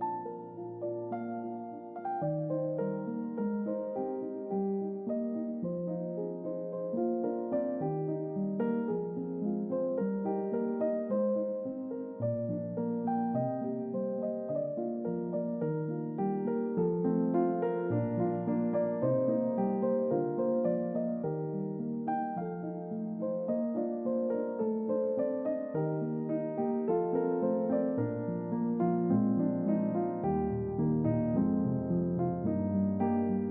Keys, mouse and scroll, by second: 0.4 shift+middle click, 1.3 click, 3.4 click, 4.5 click, 6.3-7.0 typing, 7.9 Return, 10.9 click, 13.5-17.3 drag, 18.0 click, 20.0 middle click, 20.0-23.6 scroll down 1, 23.6-27.1 drag, 28.2-28.5 middle drag, 28.8 click, 29.2-31.0 middle drag, 31.3-31.6 ctrl+middle drag, 31.8-33.1 ctrl+middle drag.